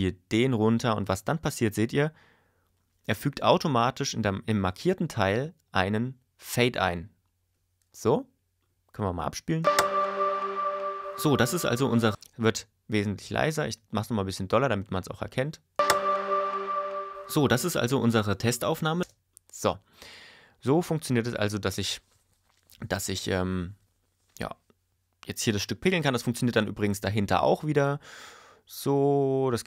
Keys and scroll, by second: 9.6 space, 12.1 space, 15.7 space, 19.0 space.